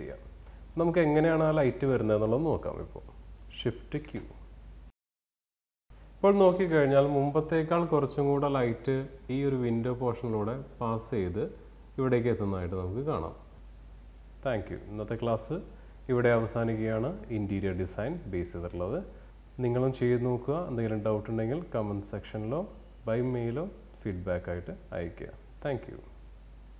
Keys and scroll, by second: 2.5 shift+q.